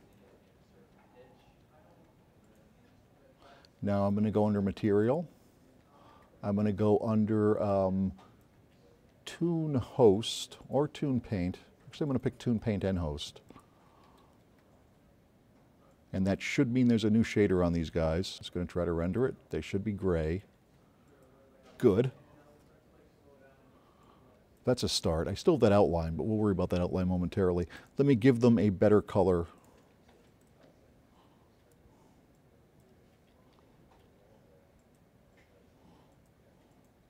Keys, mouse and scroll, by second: 0.9 click, 15.8 click, 30.3 click, 31.5 click, 33.0-34.3 drag.